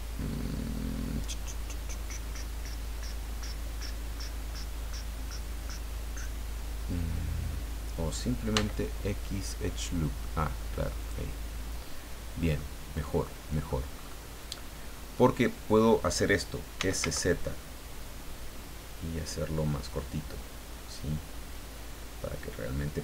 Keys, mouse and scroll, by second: 8.5 x, 11.0 click, 11.9-12.3 scroll down 1, 12.5-13.8 middle drag, 13.9-14.3 scroll up 1, 16.5-17.5 typing.